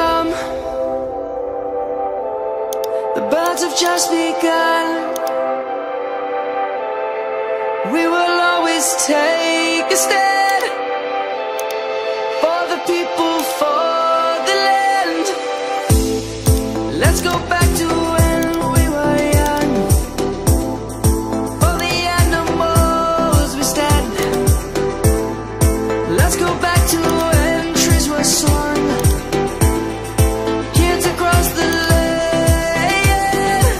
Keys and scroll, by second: 33.5 ctrl+t.